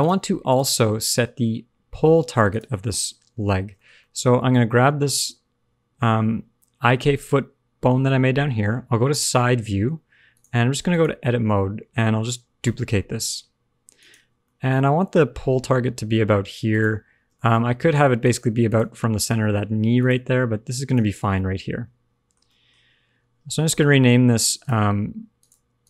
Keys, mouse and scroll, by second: 0.4 click, 2.4 click, 3.9 shift+middle click, 5.4 middle click, 7.8 KP_3, 8.9-10.3 scroll up 2, 10.3 click, 10.3-10.8 scroll up 1, 11.4 shift+middle click, 11.9 scroll down 1, 12.6 shift+d, 14.4 shift+middle click, 15.6 f, 15.9 g, 17.3 shift+middle click, 17.5-17.9 scroll up 2, 18.2 click, 18.6 click, 19.9 click, 20.4 g, 21.1 scroll down 3, 21.3 middle click, 22.4 shift+middle click, 22.7 scroll up 1, 24.6 click, 25.3 click.